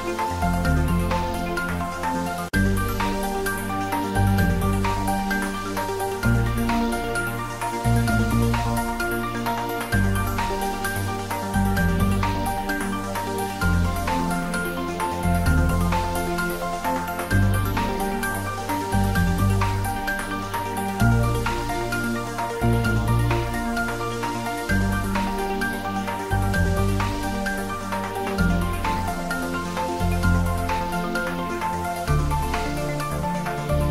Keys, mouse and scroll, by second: 0.8-1.6 click, 1.8 s, 2.7 Tab, 3.0-3.4 ctrl+middle click, 3.5 Tab, 3.7-4.1 shift+middle click, 4.2 click, 4.5 ctrl+s, 5.4 click, 9.9 ctrl+middle click, 10.5 click, 25.9 click, 29.2 ctrl+middle click, 30.7 s, 33.3 click, 33.5 ctrl+middle click.